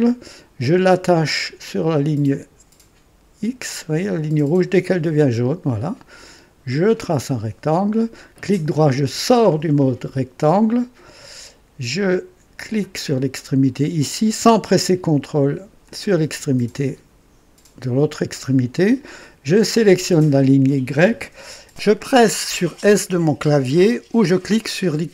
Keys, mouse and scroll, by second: 5.2 click, 6.8 click, 8.3 right click, 12.5 click, 15.8 click, 19.4 click.